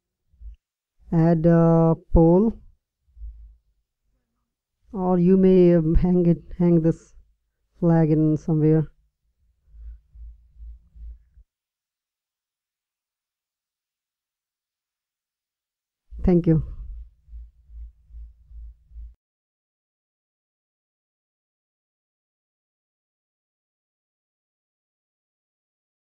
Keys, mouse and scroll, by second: 21.2-23.0 drag.